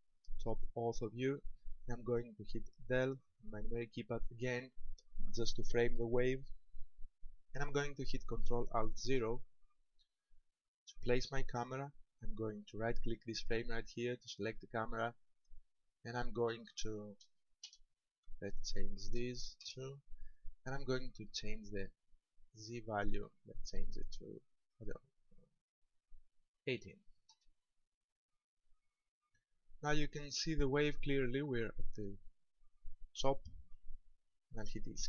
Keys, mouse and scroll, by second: 3.2 KP_Decimal, 9.1 ctrl+alt+KP_0, 14.1 right click, 16.7 click, 18.5 click, 21.0 click, 25.7 click, 28.8-29.2 scroll up 2.